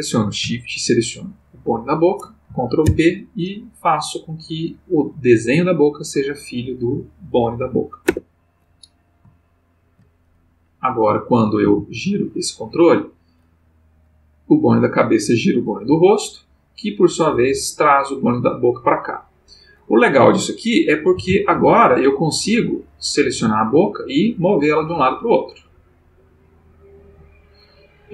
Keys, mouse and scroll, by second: 1.5 shift+click, 2.8 ctrl+p, 8.0 Return, 9.5 ctrl+middle click, 10.5 click, 11.6 r, 14.2 click, 15.7 click, 19.6 click, 21.1 alt+r, 22.7 click, 23.3 g, 27.4 click.